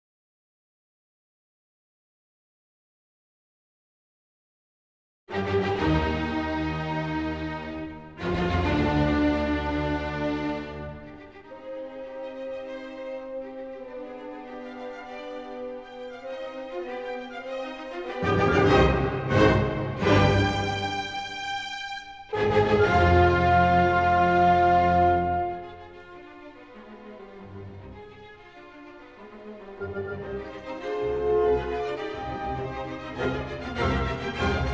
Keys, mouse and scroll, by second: 1.3 click, 2.6 scroll, 3.7 scroll, 4.0 click, 5.3 s, 6.7 click, 9.0 click, 9.7-10.0 scroll down 4, 10.3-10.8 ctrl+scroll up 2, 11.3-11.8 ctrl+scroll up 7, 12.1-12.7 scroll, 13.1 scroll, 16.4 click, 17.1-20.2 scroll, 21.6-22.6 scroll, 22.6 middle click, 24.5 click, 25.4 right click, 26.9 click, 28.9 n, 30.1 ctrl+scroll, 30.4 s, 31.8 click, 32.2 scroll, 32.8-33.4 scroll, 34.1 click, 34.1 middle click, 34.2 scroll.